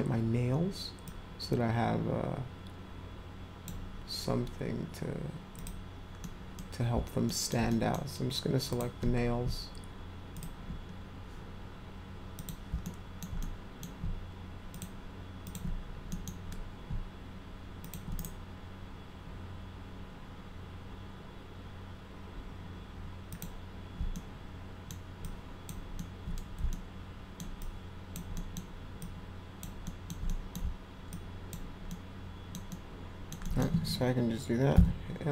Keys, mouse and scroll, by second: 1.0-3.7 drag, 5.6 click, 6.2-6.5 middle drag, 7.2 alt+middle click, 7.7 middle click, 8.7 click, 10.3 ctrl+click, 12.4 click, 12.8 alt+middle click, 13.4-13.8 middle drag, 14.7 ctrl+click, 15.4 ctrl+click, 16.1 middle click, 17.8 ctrl+click, 23.3 click, 24.1 alt+middle click, 25.2-25.7 alt+drag, 26.0 alt+middle click, 26.7 alt+middle click, 27.6-28.1 alt+drag, 28.3 alt+middle drag, 29.0 alt+click, 29.8 alt+middle click, 30.1 alt+scroll up 3, 30.3 middle click, 30.5 scroll down 2, 30.6 alt+scroll up 2, 30.8 alt+scroll down 2, 31.1 alt+click, 31.9 alt+middle click, 32.7 alt+middle click, 33.4 middle drag.